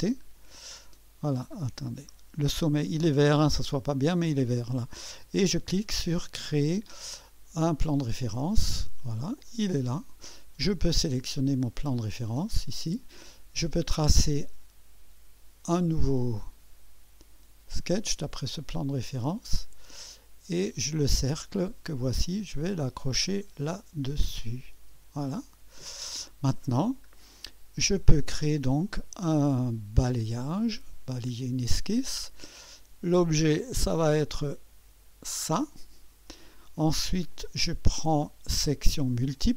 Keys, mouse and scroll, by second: 0.9 middle click, 1.6-2.1 scroll down 2, 7.8 click, 9.5 click, 10.8 click, 11.5 click, 12.3 click, 14.1 click, 14.5-17.2 drag, 17.6-18.9 drag, 19.9 right click, 21.4 click, 23.4 click, 24.6 click, 25.9 click, 26.7 scroll down 1, 28.6 click, 31.7 click, 33.4 click, 35.2 click, 37.3 click, 39.1 click.